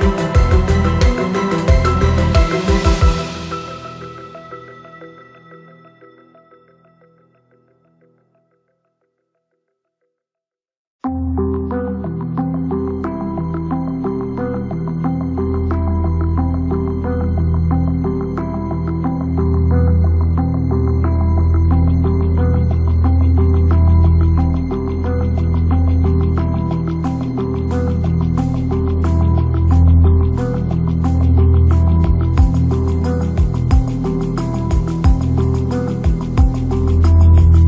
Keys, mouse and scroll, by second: 0.0 s, 0.6 g, 2.3 Tab, 2.7 3, 2.8 click, 3.6 m, 4.6 shift+click, 5.3 2, 5.5 alt+click, 6.0 ctrl+b, 8.3 Tab, 9.2 ctrl+4, 10.3 s, 12.0 click, 12.8 click, 17.8-19.5 drag, 23.8 click, 26.6 click, 27.1 click, 29.0 click, 29.8 click, 31.2 click, 33.8 click, 34.2 click, 35.9 click, 36.5 shift+a.